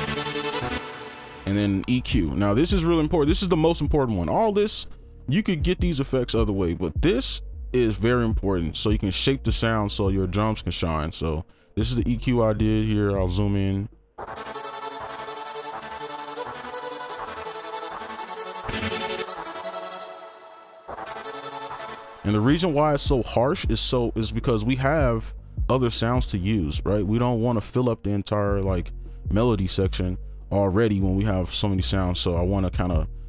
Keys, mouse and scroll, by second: 0.6 double click.